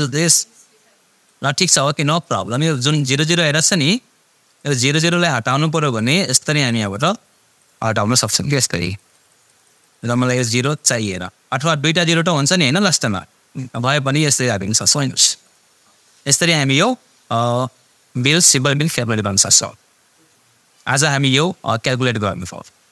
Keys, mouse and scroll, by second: 0.3-1.9 drag, 14.6 click.